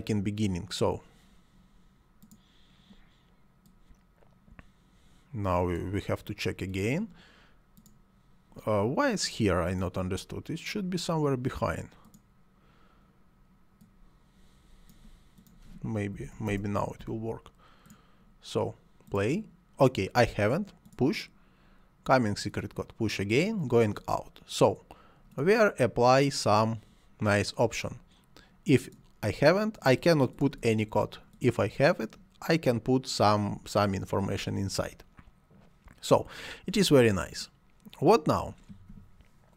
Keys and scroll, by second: 15.9-16.7 typing.